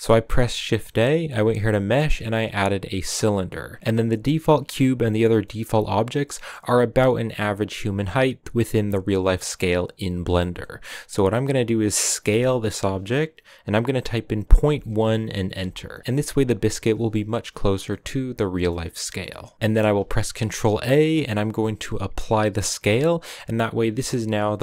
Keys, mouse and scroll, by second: 0.3 shift+a, 3.7 scroll down 1, 4.0-12.1 middle drag, 12.1 s, 16.0 middle click, 16.1-17.8 scroll up 4, 16.6 middle click, 17.8-19.3 middle drag, 19.3 scroll up 2, 19.5 ctrl+a, 20.2 ctrl+a.